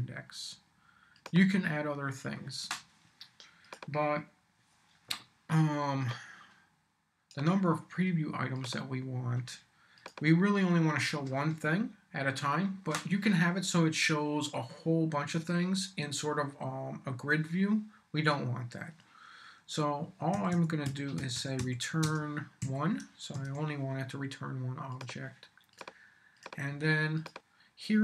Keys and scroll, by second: 20.1-22.6 typing, 23.0 super+i, 23.3 super+s.